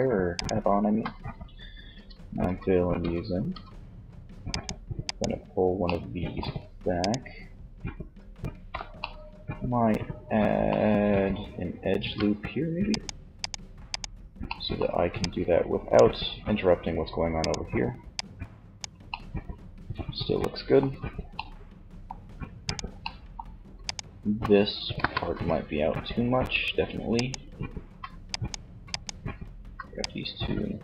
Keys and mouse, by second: 1.2 f, 1.5 f, 2.0 f, 2.6 f, 11.0 ctrl+r, 12.5-13.6 drag, 15.1 click, 16.5 right click, 18.0-19.1 middle drag, 20.7 middle click, 21.8 middle click, 24.0 KP_1, 24.3 z.